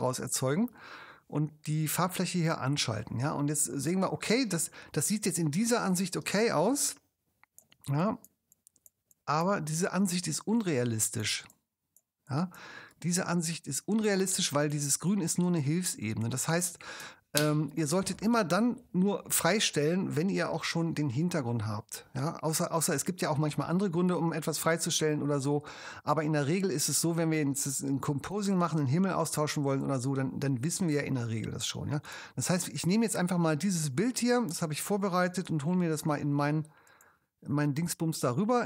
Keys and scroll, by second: 6.2 space, 17.4 super+0, 35.2 ctrl+super+j.